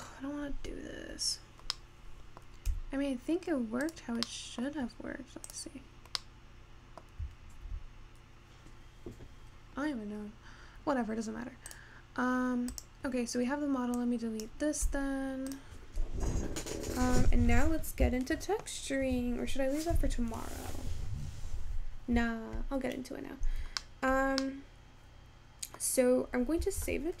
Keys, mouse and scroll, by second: 0.3-1.9 scroll up 4, 1.9-3.6 middle drag, 3.6 s, 4.4-5.9 middle drag, 5.9 click, 6.1-6.7 scroll down 1, 6.7-8.5 middle drag, 8.5 ctrl+z, 10.4-12.1 scroll down 1, 12.1 click, 13.2-14.1 scroll up 1, 14.1 click, 15.2 x, 17.8-19.3 scroll up 4, 19.3-20.2 scroll down 3, 23.7-24.0 scroll down 1, 24.0-27.2 shift+middle drag.